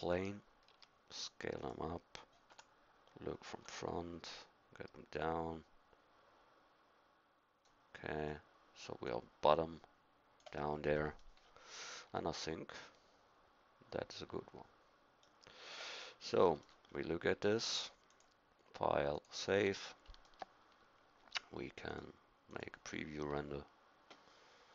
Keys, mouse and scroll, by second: 0.7 s, 2.5 KP_1, 3.5 KP_1, 8.4-11.0 drag, 16.0 click, 19.6 middle click.